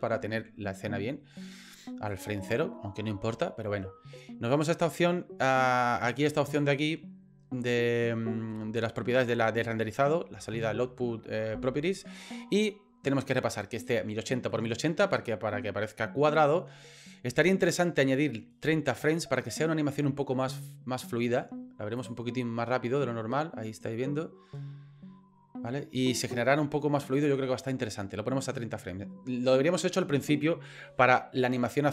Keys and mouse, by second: 2.1 click, 6.4 click, 17.7-19.2 drag, 22.0 click, 26.2 click, 27.2 click.